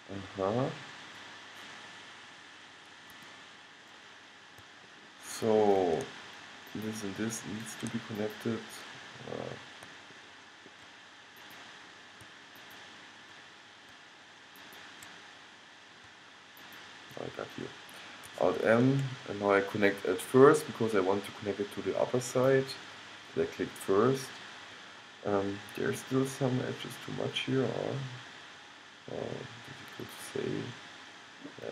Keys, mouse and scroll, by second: 2.6 middle click, 4.2-6.9 middle drag, 6.9 right click, 7.0-8.3 middle drag, 9.1-10.3 drag, 10.3-11.5 middle drag, 11.5-14.6 drag, 14.8-16.5 drag, 16.5 middle click, 16.8 click, 18.9 alt+m, 23.7-30.8 middle drag.